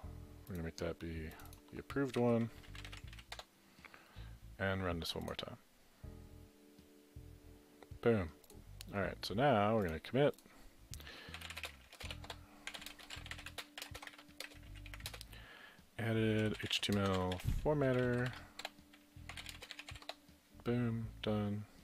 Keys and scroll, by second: 2.0-3.7 typing, 11.2-20.5 typing.